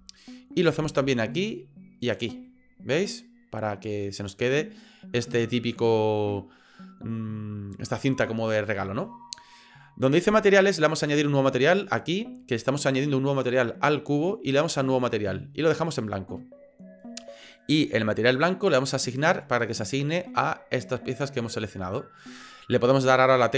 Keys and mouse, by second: 1.3 alt+shift+right click, 2.0 alt+shift+right click, 2.5-7.1 middle drag, 11.9 click, 15.0 click, 19.1 click, 20.2-22.2 middle drag.